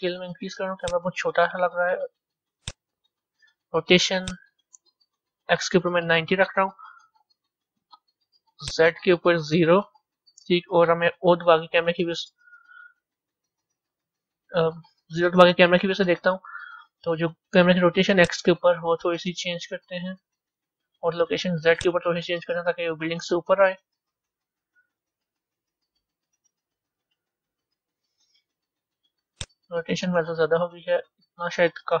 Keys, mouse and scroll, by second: 2.7-7.3 drag, 9.2-11.6 drag, 11.6 o, 13.4 o, 15.2 KP_0, 18.3-24.3 drag, 24.3 middle click, 25.1 scroll up 1, 25.3-26.5 scroll down 10, 26.5-27.0 scroll down 4, 27.0-29.4 middle drag, 29.4-32.0 drag.